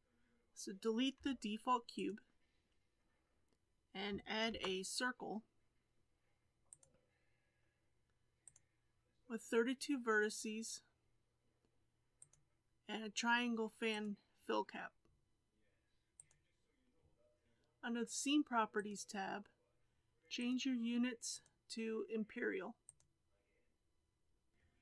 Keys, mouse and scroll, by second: 1.1 x, 4.4 shift+a, 8.4-11.5 drag, 12.1-15.3 drag, 16.1-17.4 drag, 18.7 click, 20.3-24.3 drag.